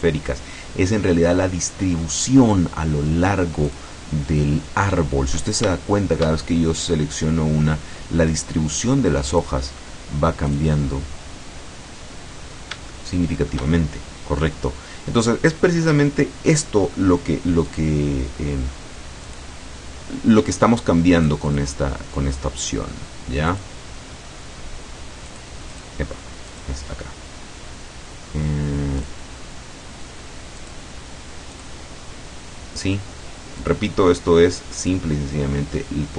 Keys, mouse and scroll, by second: 3.8 click, 4.6-5.0 scroll down 2, 5.8 shift+click, 6.4 shift+middle click, 8.4 scroll up 2, 9.4 click, 10.6 click, 11.8 scroll down 2, 12.4 scroll down 2, 13.0 shift+middle click, 17.8 click, 19.4 click, 21.3 click, 23.6 click, 25.4 click, 25.8 click, 26.6 click, 29.1 click, 30.6 click, 31.6 click, 33.7 click, 34.9 click.